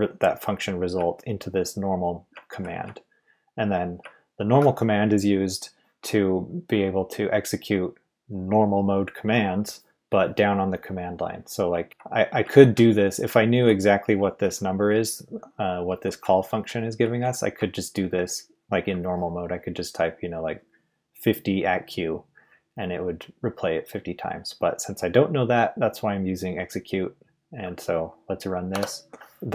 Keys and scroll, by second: 0.9 Left, 2.4-2.8 Left, 2.8 Right, 3.1 Right, 4.0 Left, 7.7 Left, 11.8 Right, 13.2 Left, 14.0 Right, 14.9 Left, 16.2 Right, 18.4 Right, 28.7 Return, 29.0 ctrl+u.